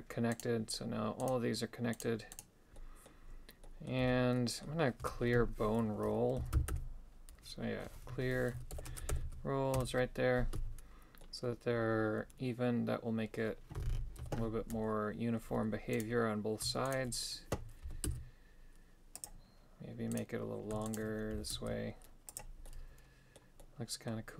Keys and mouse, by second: 0.4 right click, 1.3 right click, 2.0 right click, 2.4 right click, 2.8 middle click, 3.7 middle click, 4.0 a, 4.4 middle click, 5.1 space, 11.2-13.4 middle drag, 14.2 KP_7, 16.0 right click, 16.9 shift+right click, 17.9 g, 20.2 right click, 20.9 shift+right click, 21.4 g, 22.7 middle click, 23.6 middle click.